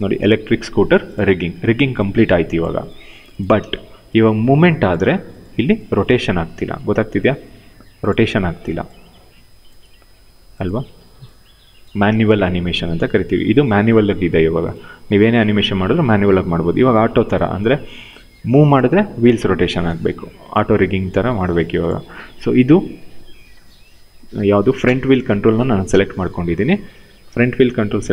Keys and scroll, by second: 3.2 w, 4.6 ctrl+z, 6.6 ctrl+z, 8.1 e, 9.8 ctrl+z, 10.5 w, 11.8 ctrl+z, 19.5 ctrl+z, 20.7 w, 24.5 f.